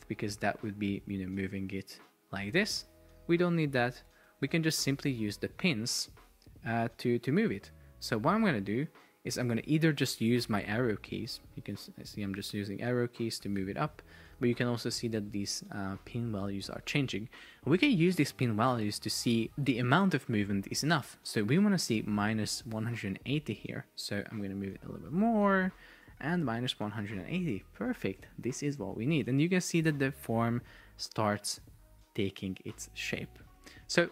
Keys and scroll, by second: 4.2 Return, 10.9 Up, 11.9 shift+Up, 24.0 shift+Up, 26.0 Up, 26.3 Down.